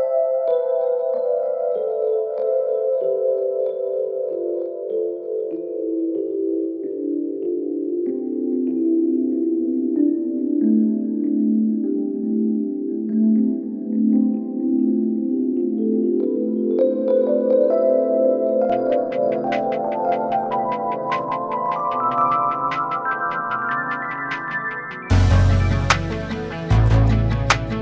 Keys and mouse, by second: 0.5 a, 1.5 ctrl+a, 4.0 middle click, 5.9-6.3 shift+middle drag, 6.6 middle click, 7.9 s, 10.8 middle drag, 11.3 ctrl+a, 12.6-13.0 middle drag, 13.6 shift+middle drag, 14.0-14.4 middle drag, 14.7-16.9 shift+middle drag, 17.2 shift+middle drag, 17.7 middle click, 18.2-18.5 middle drag, 19.5-20.4 shift+middle drag, 20.8 shift+middle drag, 21.4 shift+middle drag, 22.4 shift+middle click, 23.1-23.5 shift+middle drag, 23.9-24.2 shift+middle drag, 24.6 shift+middle drag, 25.3-27.7 middle drag.